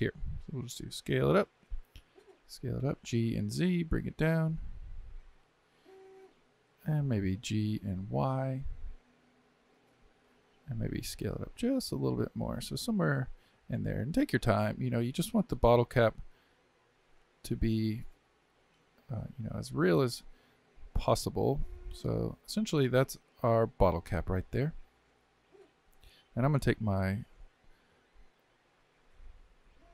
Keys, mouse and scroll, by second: 2.2 s, 2.9 g, 26.1 click.